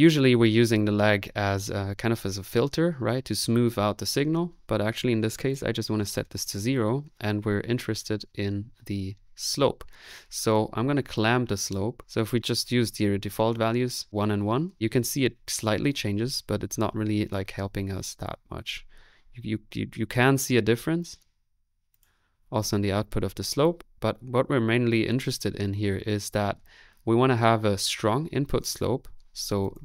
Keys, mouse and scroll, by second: 13.3-14.5 middle drag, 14.7 space, 19.2-20.4 middle drag, 20.4-22.1 drag, 23.6 middle click, 24.0-24.5 typing.